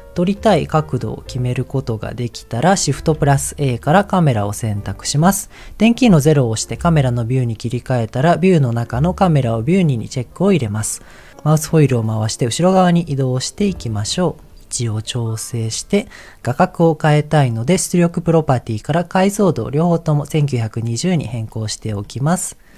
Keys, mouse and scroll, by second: 0.4-1.7 middle drag, 1.9-2.6 scroll down 2, 6.3 KP_0, 8.1 click, 9.3 click, 11.7-14.1 scroll down 9, 14.4 shift+click, 14.5 ctrl+middle click, 18.0 click, 19.1-20.4 drag, 22.0 ctrl+middle click.